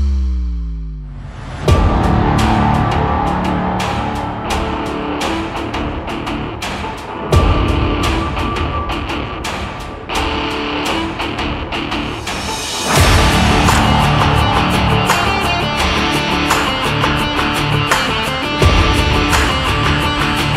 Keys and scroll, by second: 12.8 p, 20.2 ctrl+z.